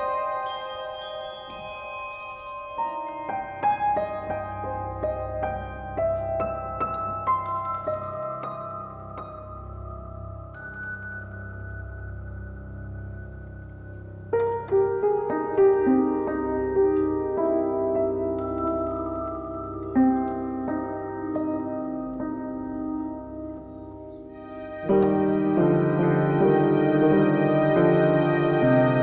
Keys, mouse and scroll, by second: 1.0 scroll, 1.7 middle click, 1.7 z, 2.3 click, 3.2 z, 3.8 click, 5.1 shift+click, 5.6 Delete, 7.6 scroll, 10.0-10.9 alt+scroll, 10.9 alt+middle click, 12.3 click, 12.7 scroll, 13.4-13.8 scroll, 14.3 scroll, 14.9 alt+middle click, 15.0-15.5 scroll, 17.1 middle click, 17.2 a, 17.3 click, 19.8 click, 20.5 1, 20.6 Return, 21.7 click, 22.9 middle click, 23.7 click, 24.8 middle click, 24.8 middle click, 25.9-26.2 middle click, 26.0 middle click, 27.9 click, 28.3 middle click, 28.3 middle click.